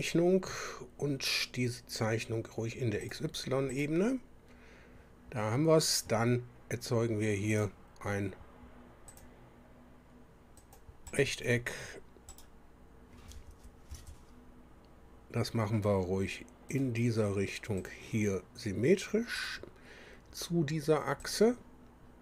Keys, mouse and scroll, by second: 3.0 click, 3.7 click, 7.5 click, 9.1 click, 10.6 click, 11.1 right click, 12.3 right click, 13.9 Escape, 16.7 click, 17.8 click, 19.4 click, 21.2 click.